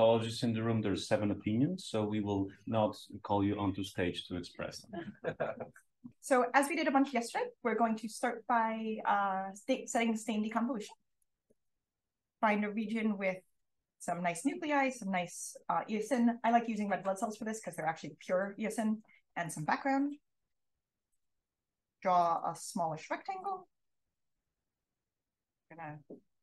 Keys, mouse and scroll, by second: 0.9-6.0 scroll down 1, 6.0-7.0 scroll down 1, 7.0-7.7 drag, 7.0-10.0 scroll up 1, 10.0-10.4 drag, 10.0-12.3 scroll up 1, 11.1 drag, 11.8 click, 12.3-12.6 scroll down 1, 12.6-16.2 scroll up 1, 13.2 drag, 16.2-21.2 scroll up 1, 21.2 click, 21.2-22.2 scroll up 1, 22.2-24.1 drag, 22.2-24.1 scroll up 1, 24.1-24.6 scroll up 1, 24.6-26.4 scroll up 1.